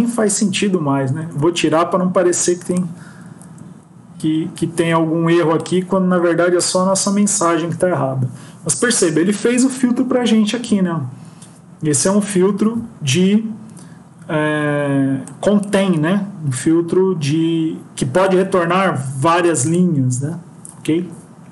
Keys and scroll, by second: 0.5 ctrl+x, 1.1 ctrl+s, 3.1 Up, 4.4 Up.